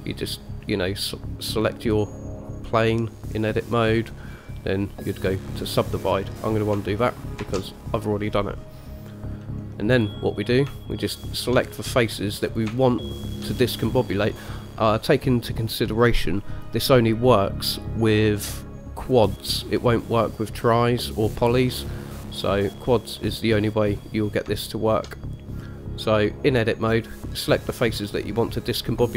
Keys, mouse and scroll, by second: 1.2-5.5 right drag, 7.6 ctrl+z, 10.1 click, 11.1 shift+click, 11.9 click, 12.6 click, 13.4 shift+click, 14.6-16.3 middle drag, 24.8 shift+middle click.